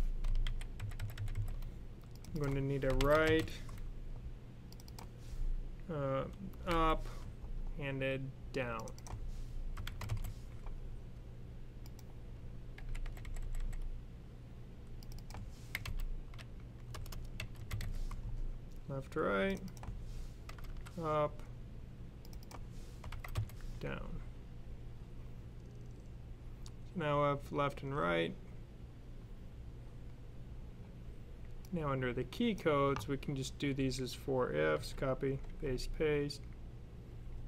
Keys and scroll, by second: 0.3-1.2 typing, 2.5-3.3 typing, 6.4 typing, 9.6-9.9 typing, 12.6 super+c, 12.7-13.5 typing, 15.6-17.7 typing, 20.1-20.9 typing, 22.6-23.4 typing, 34.6 super+c, 35.2 super+v, 36.9 super+v.